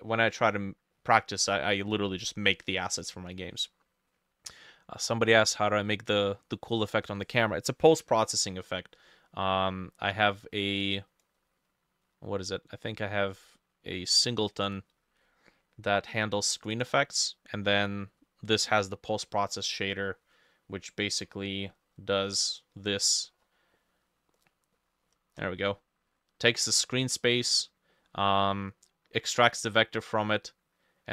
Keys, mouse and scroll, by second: 0.4 middle click, 1.0 middle click, 1.6 middle click, 2.8 middle click, 3.4 middle click, 6.2 middle click, 7.0 middle click, 9.0 middle click, 16.8 double click, 19.3 middle click, 23.4-23.8 scroll down 5, 23.8 middle click, 24.4 middle click, 24.8-25.1 scroll down 2, 25.1-25.6 scroll up 6, 25.6 middle click, 27.2 middle click, 28.0 middle click, 29.1 middle click.